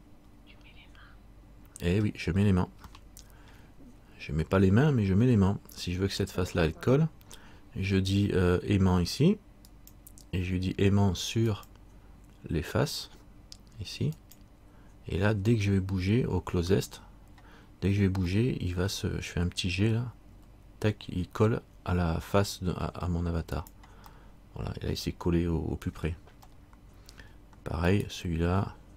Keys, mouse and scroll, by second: 3.1 shift+middle click, 9.9 click, 18.5 middle click, 20.5 g, 24.3 middle click, 26.7 middle click, 28.1 right click.